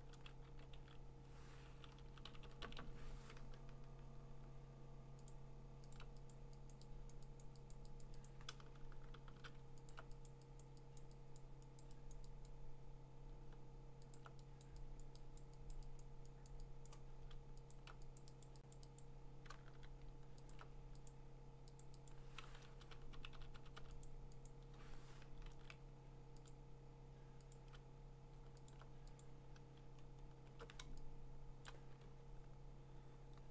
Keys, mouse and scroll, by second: 0.2 ctrl+z, 0.5 ctrl+z, 0.8 ctrl+z, 1.8-2.8 typing, 5.3 alt+click, 6.0 alt+click, 6.3 click, 6.7 click, 7.1 click, 7.4 click, 7.7 alt+click, 7.8 click, 8.0 click, 8.3 click, 9.1 alt+click, 9.2 !, 9.9 alt+click, 10.0 alt+click, 10.3 click, 10.6 click, 11.0 click, 11.4 click, 11.8 click, 12.1 click, 12.9 click, 14.2 alt+click, 14.6 click, 15.0 click, 15.4 click, 15.7 click, 16.0 click, 16.5 click, 16.9 click, 17.7 alt+click, 18.2 click, 18.5 click, 18.7 click, 19.0 click, 19.7 s, 20.5 alt+click, 21.1 click, 21.8 click, 22.1 click, 22.7-23.8 typing, 24.0 click, 24.5 click, 25.5 ctrl+z, 26.5 click, 27.5 click, 28.7 alt+click, 29.2 click, 29.9-30.6 scroll, 31.3 alt+click, 31.7 click, 32.2-32.7 scroll, 33.4-33.5 scroll.